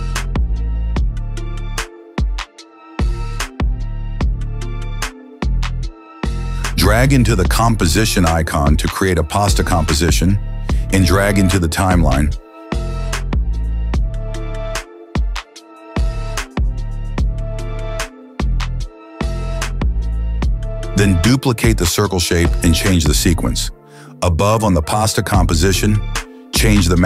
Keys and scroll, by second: 18.9 Return, 19.4-21.5 typing, 24.3 ctrl+d.